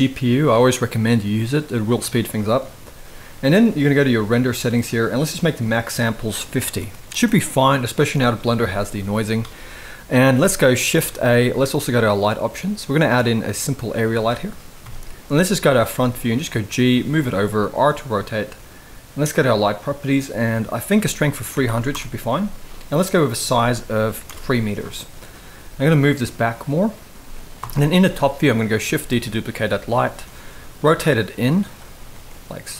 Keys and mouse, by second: 5.3-6.9 drag, 10.8 shift+a, 14.5 KP_1, 15.6 g, 16.9 r, 20.4-21.6 drag, 21.3 0, 23.0-24.0 drag, 25.3 g, 27.3 KP_7, 28.5 shift+d, 29.7 r, 31.8 r.